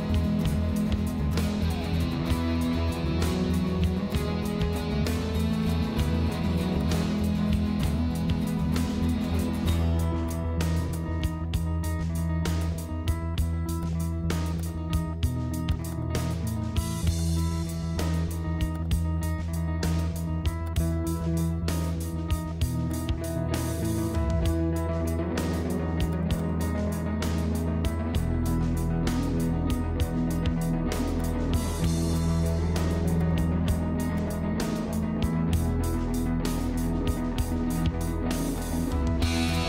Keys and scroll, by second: 23.7 BackSpace, 23.8 4, 27.0 ctrl+0, 35.0 ctrl+z, 35.9 z, 37.0 ctrl+z.